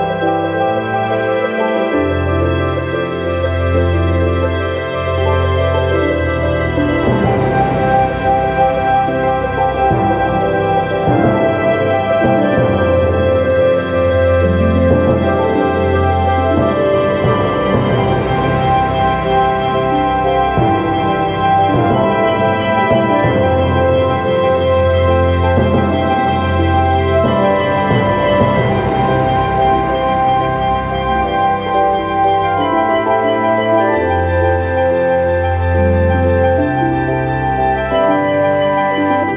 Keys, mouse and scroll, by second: 0.7 click, 1.7 1, 2.2 2, 3.0 scroll down 2, 4.0 scroll up 2, 5.2 click, 5.9 click, 7.7 click, 8.9 right click, 9.8 click, 11.0-13.1 drag, 13.6-14.3 scroll up 3, 16.0-17.9 drag, 19.2 click, 20.0 click, 21.1 0, 21.7 scroll down 1, 23.6 click, 24.7 click, 28.7 click, 29.9 click, 30.7 click, 31.2 space, 31.6 click, 32.7 middle click, 32.8 right click, 33.5 click, 34.6 1, 35.1 2, 36.1 scroll up 2, 37.0-39.3 drag.